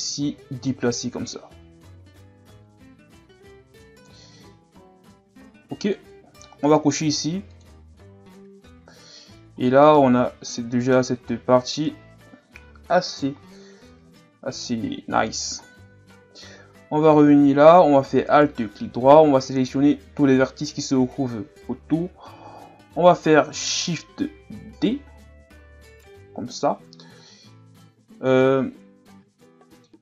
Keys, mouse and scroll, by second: 0.5-3.5 drag, 5.8-7.6 drag, 8.6-9.0 scroll down 2, 9.0 Tab, 9.6 scroll down 1, 9.8-11.2 middle drag, 11.2-11.9 scroll up 1, 11.9 KP_1, 15.6-16.0 scroll down 2, 16.0-16.4 scroll up 1, 16.4 Tab, 17.0-17.9 ctrl+scroll up 2, 18.3 alt+right click, 24.7 shift+d, 28.4-30.0 middle drag.